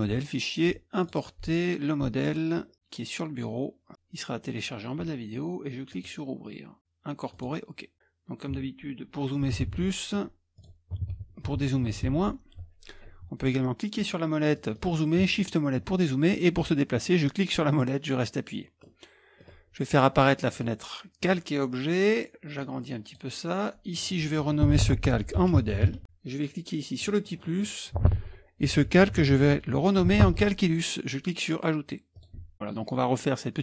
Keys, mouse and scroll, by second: 1.0 click, 9.5 KP_Add, 9.6 KP_Add, 10.6 click, 11.0 KP_Add, 11.9 KP_Subtract, 12.0 KP_Subtract, 17.6 middle click, 17.9 scroll up 1, 18.1 middle click, 20.5 middle click, 20.6 click, 21.2-23.4 drag, 23.9 click, 24.9-26.3 typing, 27.0 click, 28.4-29.8 typing, 32.4 click, 32.5-33.6 middle drag.